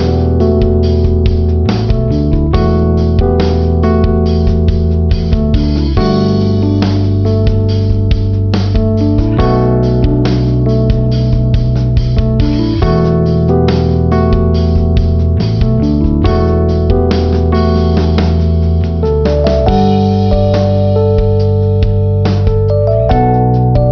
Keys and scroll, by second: 5.9 b.